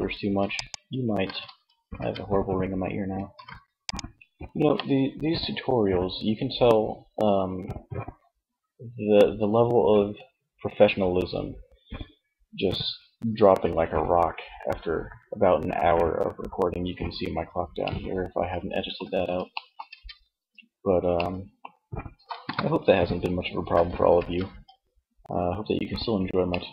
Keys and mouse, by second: 0.5 ctrl+z, 1.4 Tab, 2.7 ctrl+s, 18.6 middle click, 19.1 Tab, 21.6 KP_1, 23.4 ctrl+Tab.